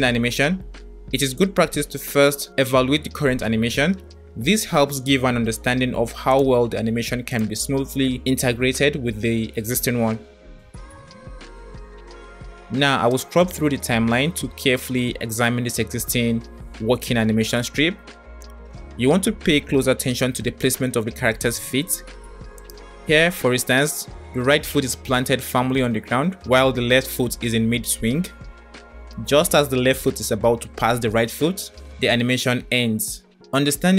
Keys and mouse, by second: 0.8-5.1 drag, 6.3 click, 7.5-10.1 drag, 13.3-16.3 drag, 22.9-32.3 drag.